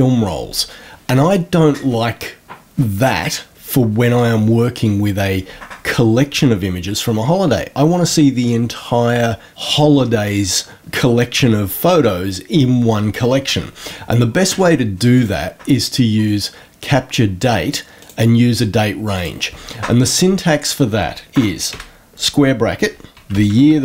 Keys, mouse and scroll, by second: 15.0 click, 17.9 click, 19.1 click.